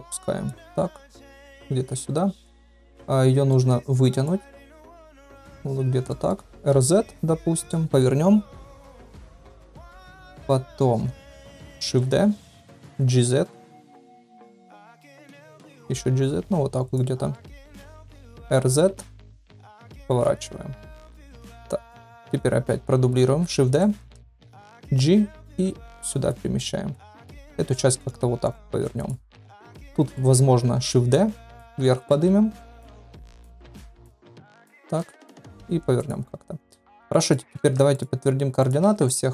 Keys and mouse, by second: 1.0 click, 1.5-1.8 middle drag, 3.5 middle click, 4.2-5.6 drag, 6.0 shift+drag, 6.5 r, 8.9 KP_1, 9.9 KP_3, 11.2 shift+drag, 11.9 shift+d, 12.9 g, 14.8 shift+drag, 15.4 g, 17.3 drag, 18.2 r, 21.8 KP_3, 23.2 shift+d, 24.2 shift+drag, 24.7 g, 26.9-27.3 drag, 27.3 r, 29.9 shift+middle drag, 30.7 shift+d, 31.6 g, 33.5 g, 35.0 r, 36.8 ctrl+a, 37.4 ctrl+a, 37.6 ctrl+a, 38.8 ctrl+a.